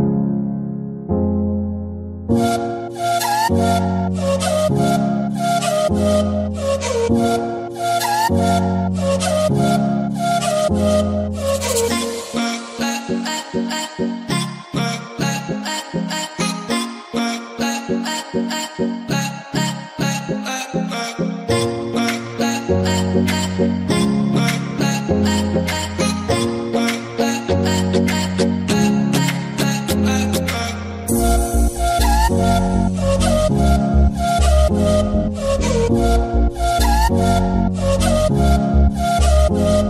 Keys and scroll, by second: 0.6 c, 2.0-3.5 typing, 8.0-8.7 typing, 12.4-13.4 typing, 15.2-16.8 typing, 18.5-19.2 typing, 25.5-27.1 typing, 31.4-33.0 typing, 34.7-36.3 typing, 38.4-39.8 typing.